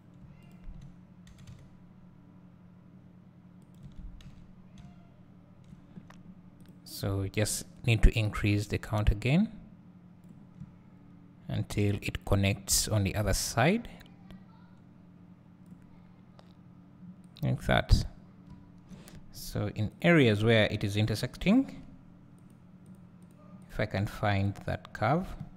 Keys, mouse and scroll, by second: 0.5 shift+click, 1.3 g, 4.0 Tab, 6.2-6.7 scroll up 2, 6.7 click, 7.6 click, 9.0-18.2 drag, 10.7 `, 18.7 `, 19.3-20.0 scroll up 1, 20.0 click, 20.6 click, 21.1 click, 22.5 click, 23.3 click, 24.5 click.